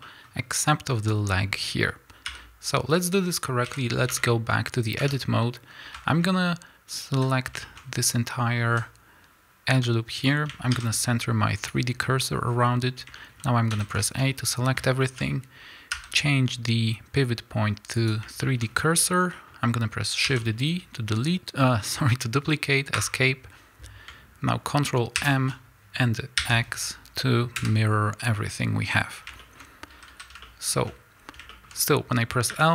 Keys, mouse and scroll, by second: 2.9 x, 3.6 KP_1, 4.8 click, 4.9 Tab, 5.8-6.2 scroll up 2, 6.0 shift+middle click, 6.9 alt+click, 7.6-12.1 shift+middle drag, 8.7 z, 11.6 shift+s, 12.4 scroll down 1, 13.2-15.0 middle drag, 13.6 a, 15.1-17.1 scroll up 1, 18.0 ., 18.4 middle click, 18.5-19.2 scroll up 1, 19.2-32.7 shift+middle drag, 20.2 shift+d, 22.9 Escape, 25.1 ctrl+m, 27.6 KP_Enter, 29.1 scroll down 2, 29.4 scroll up 3, 29.8 a, 31.0-31.4 scroll up 2, 32.4 l.